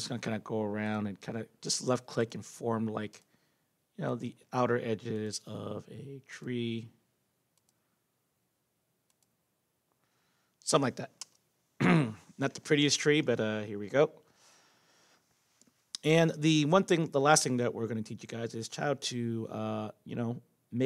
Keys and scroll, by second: 11.2 Return.